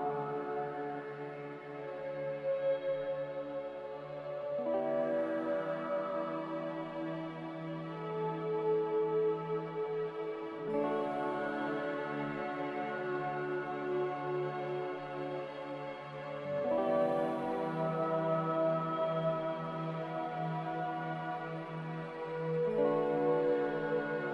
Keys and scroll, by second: 0.2 a, 0.2 shift+z, 7.3 a, 8.3 Delete, 9.9 ctrl+c, 10.1 ctrl+v, 15.9 n, 20.4 z, 21.8 typing, 24.1 ctrl+z.